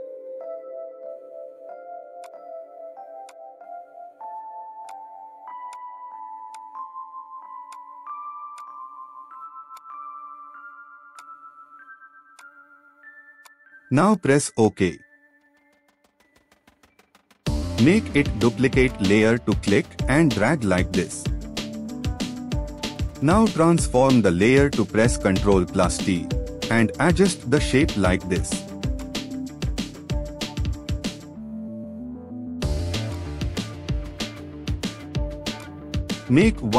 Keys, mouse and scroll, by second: 17.7-19.8 scroll up 1, 24.4 ctrl+t, 26.7-28.1 drag, 34.9-35.8 scroll up 1.